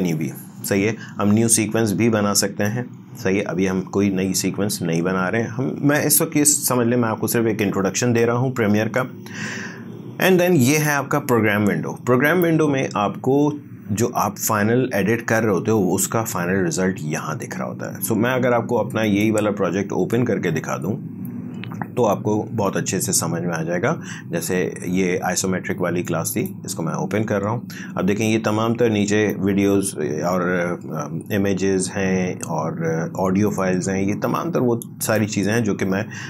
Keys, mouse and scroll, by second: 10.7 click, 19.0 click, 26.1-29.0 drag, 29.3-36.2 drag.